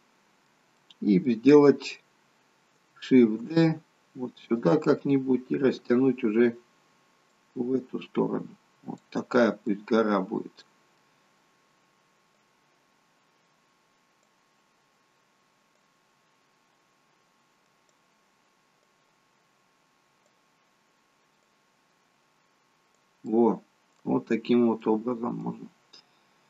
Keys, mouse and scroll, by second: 0.8 middle click, 1.5-1.9 scroll down 3, 3.3 shift+d, 7.4 click, 9.6 middle click, 10.7 middle click, 12.4 click, 15.8 click, 21.5 click, 23.2 middle click, 24.3 scroll up 5, 24.8 middle click, 25.7-26.2 scroll down 2.